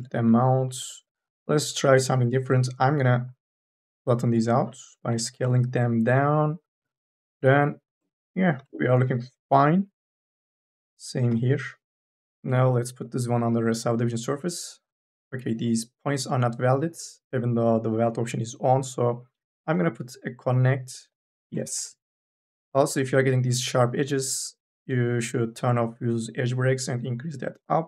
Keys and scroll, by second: 2.1 t, 5.0 e, 8.0 2, 9.1 t, 11.1 e, 22.3 n, 22.7 a.